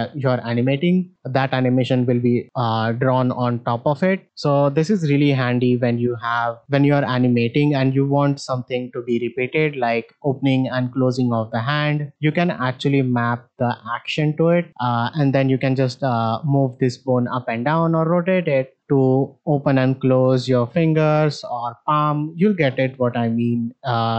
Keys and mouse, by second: 15.3 shift+middle click, 16.4 click, 17.1 click, 22.8 shift+middle drag.